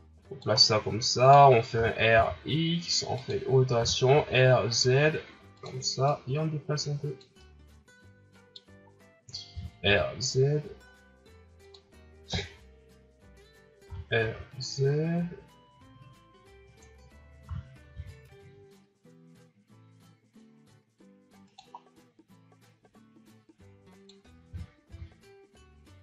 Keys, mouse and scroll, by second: 0.6-1.7 middle drag, 1.7 r, 3.8 r, 6.0-7.4 drag, 7.4-8.8 middle drag, 8.8-9.5 scroll up 1, 9.5 r, 12.3 KP_1, 13.9 r, 17.5 r, 21.8 scroll down 1, 22.6-24.4 drag, 24.4 r.